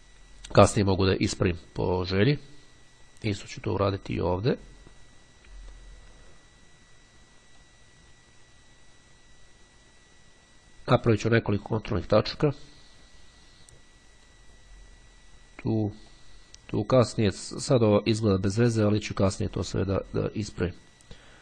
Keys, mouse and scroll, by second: 3.1-8.3 drag, 12.6-15.0 drag, 16.1-17.8 drag, 18.8-20.6 drag.